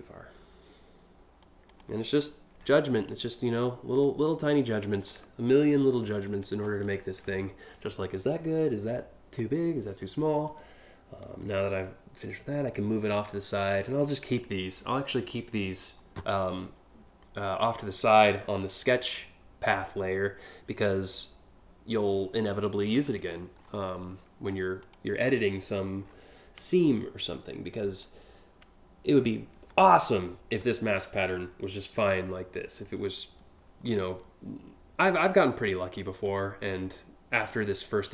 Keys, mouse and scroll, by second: 1.3 click, 1.7 scroll up 2, 2.2 alt+scroll up 1, 2.7 alt+scroll up 4, 4.1 click, 4.5 ctrl+click, 6.4 ctrl+click, 10.8-12.3 drag, 22.7 scroll up 2, 23.2-23.7 scroll up 3, 24.1 scroll down 1, 24.4 click, 24.8 scroll up 1, 25.6 scroll down 1, 27.6-28.8 drag, 34.7 click, 35.9 ctrl+click, 37.0-38.1 drag.